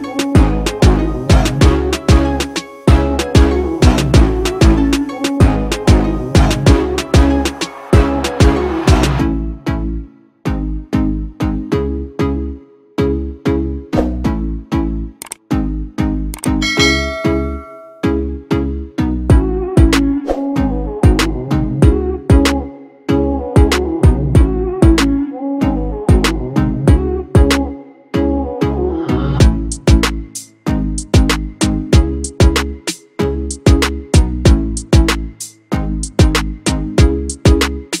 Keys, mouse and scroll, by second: 0.5 ctrl+=, 11.1 double click, 14.0 shift+click, 15.7 shift+click, 17.2 shift+click, 26.9 double click, 28.7 ctrl+-, 28.9 ctrl+-, 29.1 ctrl+-, 29.3 ctrl+-, 29.5 ctrl+-, 30.2 ctrl+-, 30.9 ctrl+=, 31.1 ctrl+=, 31.3 ctrl+=, 31.6 ctrl+=, 32.5 ctrl+-.